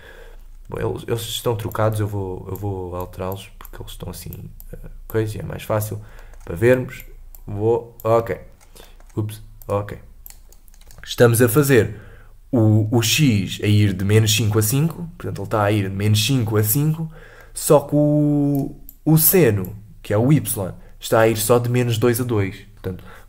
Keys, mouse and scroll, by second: 0.9-1.3 scroll down 4, 1.3-6.2 drag, 6.2 middle click, 6.7-8.2 drag, 8.2 middle click, 8.5-8.8 scroll up 2, 8.8 middle click, 9.6-10.6 drag, 10.6 scroll up 3, 11.6 click, 17.4-18.5 middle drag, 18.5-22.3 drag.